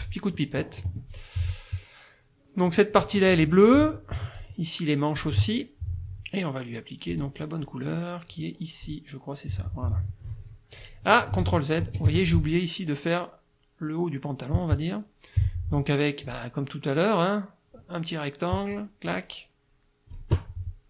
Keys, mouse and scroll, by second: 0.4 middle click, 0.9 F1, 1.1 click, 2.7 click, 3.0 F2, 3.3 click, 4.4 shift+click, 5.2 shift+click, 7.1 click, 8.9 click, 9.8 middle click, 11.4 ctrl+z, 11.8 ctrl+F1, 12.1 ctrl+F2, 12.2 ctrl+click, 16.3 click, 18.7-20.3 drag.